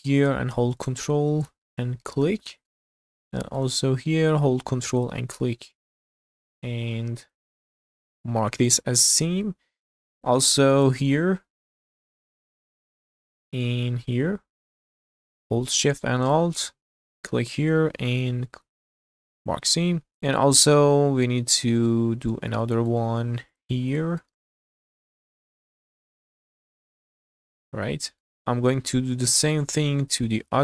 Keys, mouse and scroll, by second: 0.8 ctrl+click, 1.4 scroll down 1, 1.7 shift+middle click, 2.5 middle click, 2.9-3.2 scroll up 2, 3.3 shift+middle click, 3.8 scroll up 1, 4.9 ctrl+click, 5.4-5.9 scroll down 4, 6.2-7.3 middle drag, 7.5 q, 9.2 scroll down 1, 9.5 middle click, 10.1 scroll up 2, 10.5 shift+middle click, 11.8 alt+click, 12.6 scroll down 2, 12.9 shift+middle click, 13.3 middle click, 13.9-14.5 scroll up 2, 16.3 alt+shift+click, 16.7 scroll down 2, 17.0 middle click, 18.6 q, 19.9 scroll down 2, 20.1-21.6 middle drag, 21.9-22.4 scroll up 3, 22.6 shift+middle click, 23.5 click, 23.8 scroll down 1, 24.0 shift+middle click, 24.4 middle click, 24.8-25.1 scroll up 1, 25.2 shift+middle click, 26.0 ctrl+click, 26.5 q, 27.1-27.5 scroll down 2, 27.5 middle click, 28.4 middle click, 29.5 shift+middle click, 30.1 middle click.